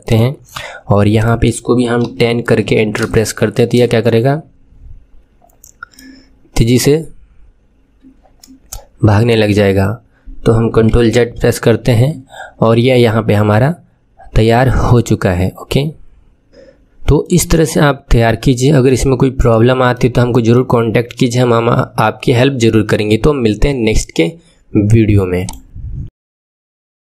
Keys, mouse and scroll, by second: 1.1-3.1 drag, 3.6 space, 5.9-8.9 middle drag, 9.4 space, 11.0 ctrl+z, 11.2 ctrl+z, 17.1-19.4 middle drag, 19.4-19.9 scroll down 1, 19.9-25.3 middle drag, 25.3-27.0 drag.